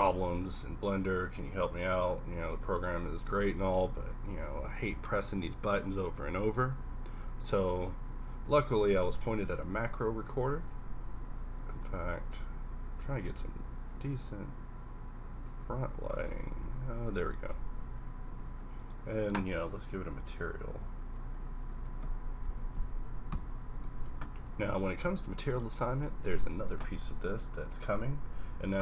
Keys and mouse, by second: 0.2 z, 0.4 z, 2.5 g, 3.4 alt+r, 6.0 shift+z, 10.4 z, 10.5 z, 11.1 r, 12.2 shift+z, 13.0 r, 21.1 click, 23.9-25.3 middle drag, 25.7 z, 25.9 z, 26.1 z.